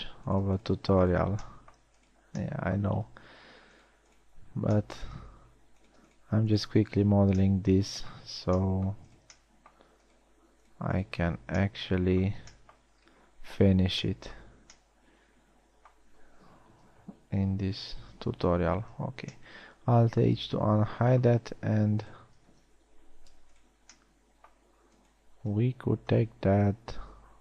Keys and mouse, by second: 5.0 f, 7.7 f, 8.2 middle click, 11.9 f, 18.6 alt+h, 19.4 a.